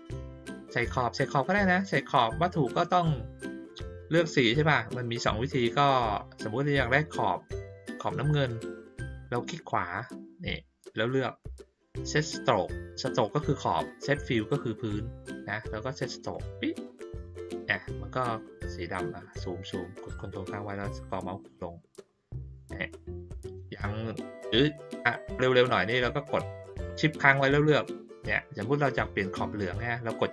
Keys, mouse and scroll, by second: 9.5 right click, 16.3 click, 18.4 scroll up 1, 19.0 scroll down 1, 19.4 scroll up 1, 20.3-21.5 ctrl+scroll up 1, 21.5 ctrl+scroll up 1, 21.6 ctrl+middle click, 21.7-22.0 ctrl+scroll down 1, 22.0 ctrl+middle click.